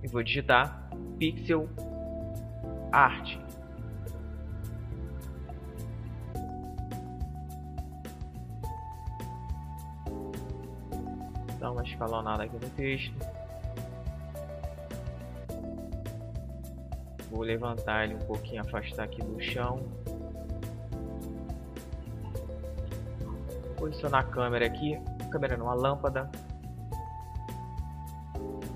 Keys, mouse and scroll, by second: 0.0-2.4 typing, 5.5 Tab, 9.9 s, 12.8 click, 13.4 middle click, 13.7 click, 13.8 middle click, 14.4 click, 14.4 middle click, 15.8-17.8 drag, 16.8-18.6 middle drag, 19.1 KP_0, 20.3 middle click, 22.6 right click, 23.0 KP_7, 24.9 g.